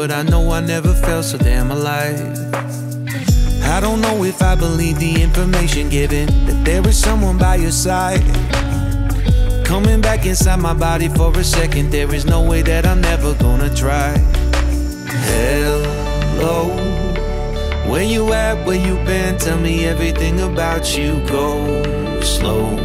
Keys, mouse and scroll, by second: 4.3-6.8 drag, 8.9-9.6 scroll down 4, 9.6-16.5 shift+middle drag, 16.5 z, 19.0 click.